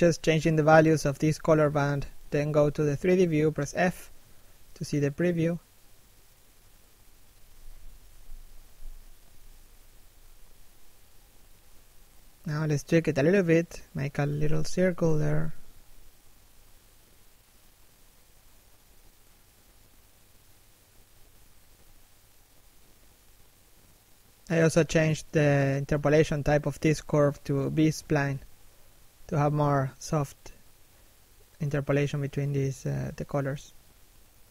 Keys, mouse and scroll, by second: 16.0 f, 16.8 right click, 18.3 f, 18.7 right click, 19.9 f, 20.3 right click, 20.6 click, 21.4 middle click, 22.3 click, 24.5 click, 25.1 middle click, 31.0 f, 31.3 click, 32.5 middle click, 33.2 shift+middle click, 33.4-34.5 scroll up 1.